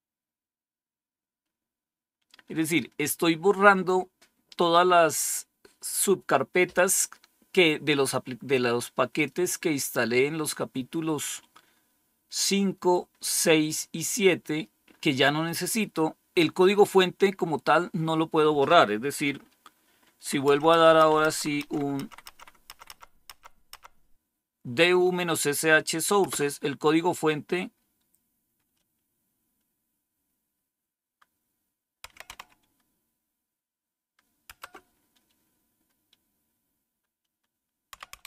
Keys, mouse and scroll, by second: 9.0 click, 10.8-12.2 scroll down 2, 12.2-14.8 scroll down 3, 14.8-15.8 scroll up 2, 20.4 Up, 20.7 Up, 20.9 Up, 21.4 Up, 21.5 Up, 21.9 Up, 22.2 Up, 22.6 Up, 22.8 Up, 23.2 Up, 23.6 Up, 26.1 Return, 31.9-32.3 typing, 34.4 Return, 37.6-38.2 typing.